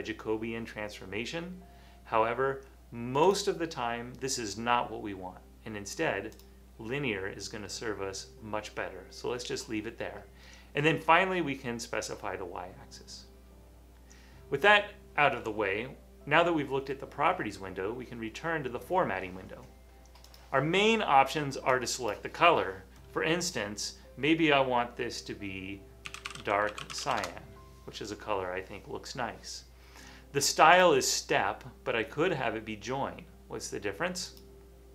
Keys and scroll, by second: 26.0-27.6 typing.